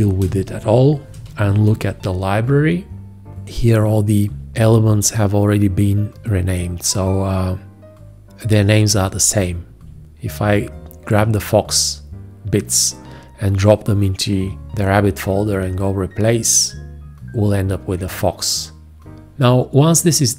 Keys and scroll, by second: 0.0 ctrl+a, 0.5 space, 1.8 ctrl+i.